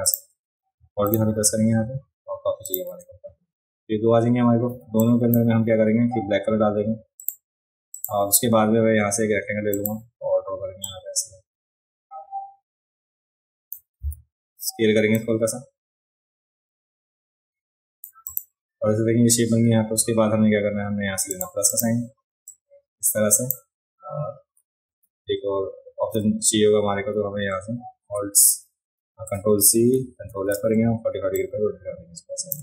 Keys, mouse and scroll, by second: 0.1 click, 2.6 click, 4.7 v, 5.0 click, 7.2 click, 7.9 click, 9.7 click, 10.8-13.7 drag, 14.1 v, 15.2-18.0 drag, 15.2-18.0 right drag, 18.3 click, 18.3 right click, 21.3 click, 21.3 right click, 21.7 click, 22.5-23.5 drag, 25.0 v, 30.0 ctrl+c, 30.3 ctrl+f, 31.4-32.5 shift+drag.